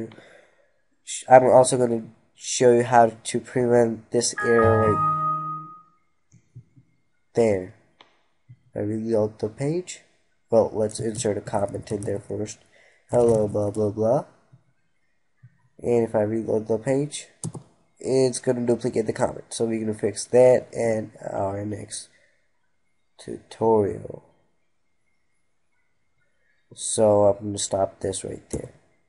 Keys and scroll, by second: 28.1 F3.